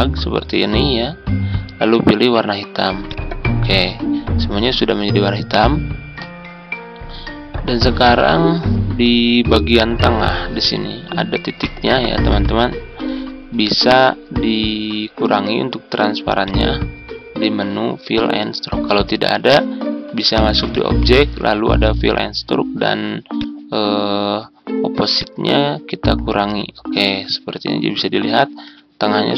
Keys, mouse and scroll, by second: 13.2-13.5 ctrl+scroll up 1, 16.3-27.7 drag, 28.3 ctrl+scroll down 1.